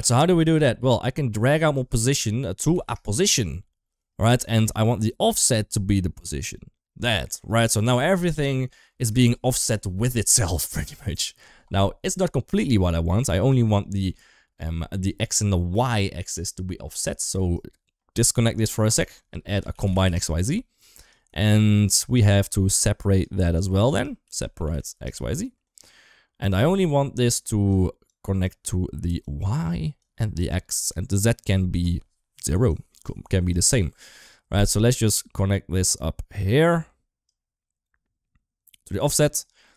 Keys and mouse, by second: 1.8-3.8 drag, 4.3 shift+middle click, 5.1 click, 5.3 click, 7.1 shift+middle click, 8.3 middle click, 8.7 shift+middle click, 17.3 ctrl+right click, 18.6 shift+a, 21.2 shift+middle click, 21.8 click, 22.6-23.0 drag, 23.7-26.3 drag, 26.6 shift+middle click, 27.1 click, 27.3 click, 27.9 click, 28.1 click, 29.2-29.9 drag, 30.2-30.8 drag, 32.5-33.3 drag, 37.1 click, 38.0-38.8 drag, 39.5-39.7 middle drag.